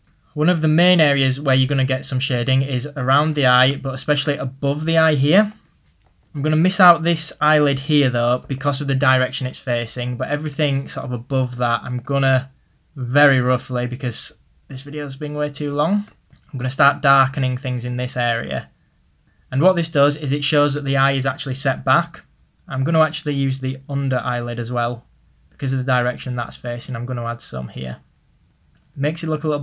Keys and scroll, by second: 2.9 ctrl+z, 9.6 ctrl+z.